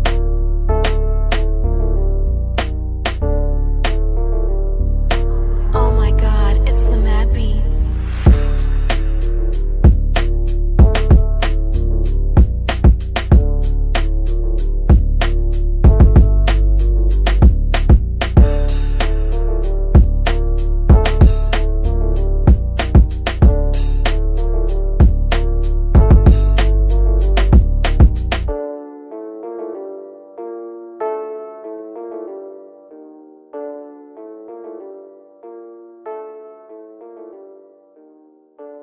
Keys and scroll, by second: 6.8 F3, 7.9 Escape, 13.2 F3, 16.7 Delete, 20.5 F3, 21.8 Escape, 24.9 Delete.